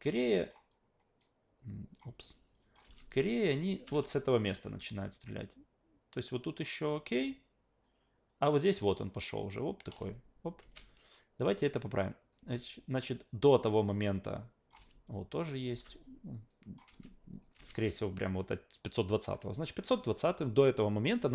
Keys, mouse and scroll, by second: 0.1 click, 0.7-2.0 drag, 2.5 click, 2.8 alt+v, 3.8 alt+v, 4.8-9.9 drag, 9.9 alt+v, 10.6 alt+v, 10.9-14.7 drag, 14.7 alt+v, 15.8 alt+v, 16.0-16.8 drag, 16.9 alt+v, 17.6 alt+v, 17.8-19.2 drag.